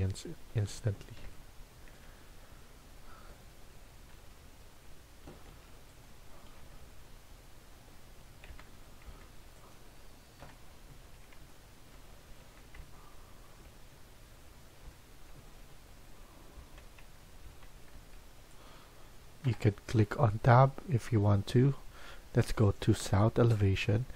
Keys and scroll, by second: 4.1 Delete, 5.4 Escape, 6.5 Delete, 8.4 Tab, 9.0 Tab, 10.3 Delete, 11.3 Tab, 16.4 Caps_Lock, 17.8 Tab, 19.4 Delete, 23.8 Delete.